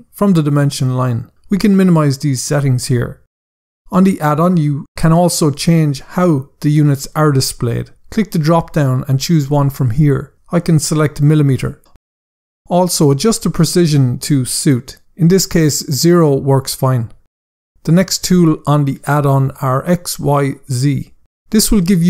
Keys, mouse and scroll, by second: 8.2 click, 11.5 click, 14.2 click, 15.0 click, 18.1 scroll up 1, 18.7 scroll up 1.